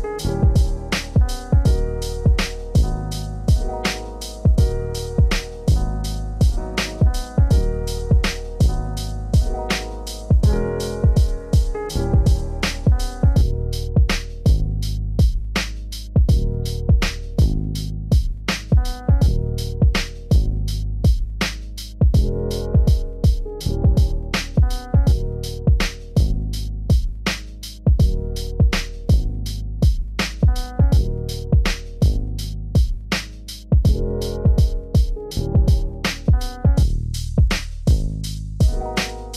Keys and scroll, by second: 19.6 shift+F6, 21.8 ctrl+BackSpace, 22.7 ctrl+d, 24.3 ctrl+space, 27.7 ctrl+;.